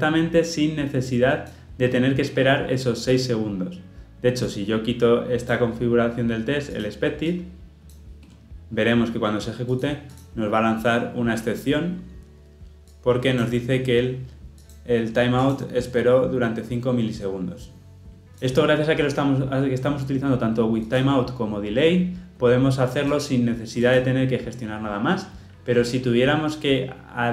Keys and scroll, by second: 18.3 ctrl+z.